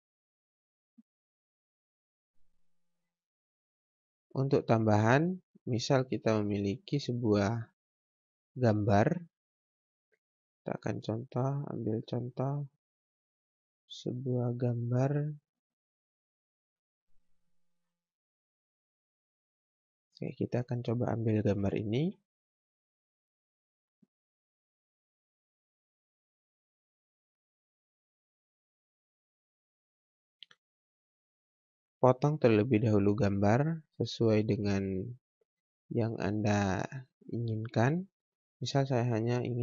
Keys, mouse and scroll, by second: 1.6-2.0 scroll down 1, 2.0 scroll up 1, 3.2 F4, 4.4 click, 6.7 click, 9.7-10.0 scroll down 1, 10.8 click, 12.4-13.2 scroll up 1, 17.8-18.2 scroll down 1, 19.6-21.2 scroll up 1, 22.0 alt+Num_Lock, 22.0 scroll up 1, 22.1 alt+Tab, 23.1 right click, 24.3 click, 25.3 scroll down 1, 25.6-26.0 scroll up 1, 28.9 click, 38.3 scroll down 1, 39.0-39.4 scroll up 1.